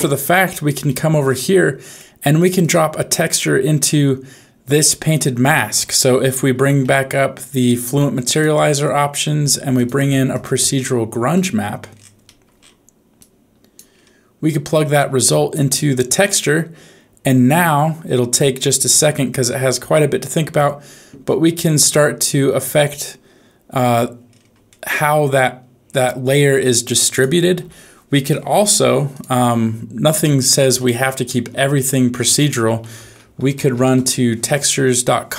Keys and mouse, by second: 0.8-2.0 middle drag, 2.7 click, 5.5 middle click, 6.8 n, 8.2-9.8 drag, 10.3-11.3 drag, 12.2 middle click, 13.2 click, 14.8 click, 21.2-22.7 middle drag, 24.6-25.8 middle drag, 27.1 click, 27.6 x.